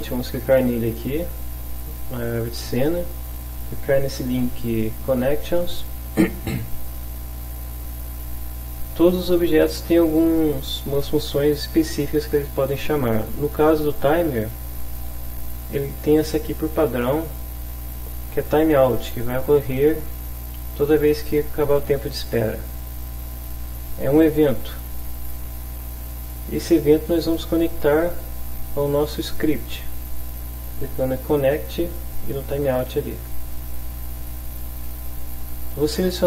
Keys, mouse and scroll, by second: 5.5 click, 16.8 click, 33.3 click.